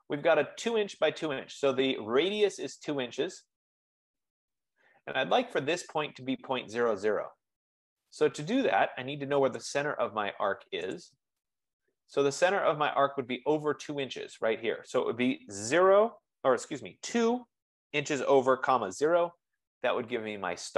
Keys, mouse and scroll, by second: 11.4-16.1 drag, 16.1-17.4 typing, 18.6-19.4 typing, 19.6 Return.